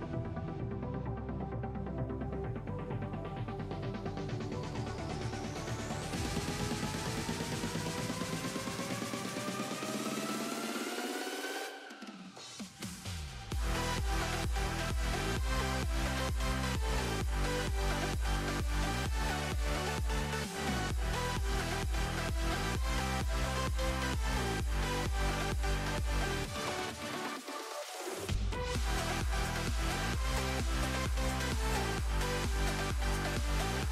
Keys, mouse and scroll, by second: 0.4 click, 0.7 click, 1.3-2.1 drag, 2.1 space, 2.2 space, 2.4 r, 3.2 click, 3.5 r, 4.1 click, 4.3 click, 4.5 r, 5.4 click, 6.1 r, 7.1 space, 10.9 space, 11.3 click, 11.7 click, 11.9 click, 12.2 click, 12.5 KP_0, 12.7-13.1 middle drag, 13.1 click, 13.3 middle click, 13.5 scroll up 1, 13.5-14.8 shift+middle drag, 15.0 click, 15.5-15.8 scroll down 1, 15.8 scroll up 1, 16.0-16.3 middle drag, 16.3 click, 16.9-17.9 drag, 18.2 click, 18.4 click, 18.6 click, 19.0-19.3 middle drag, 19.3 click, 19.9-20.9 drag, 21.2 click, 21.3 click, 21.5 click, 21.7 click, 22.0 click, 22.2 click, 22.8 click, 23.0-24.0 drag, 24.4 middle click, 25.2 KP_0, 25.6-27.2 drag, 27.2 KP_0, 27.5-28.0 middle drag, 28.0 click, 28.3 click, 28.7 click, 29.0 shift+d, 29.9-30.5 scroll down 2, 30.2 click, 30.5 click, 31.3 shift+a, 31.9 alt+g, 32.0 alt+r, 32.4 click, 32.6 click, 33.5-33.9 drag.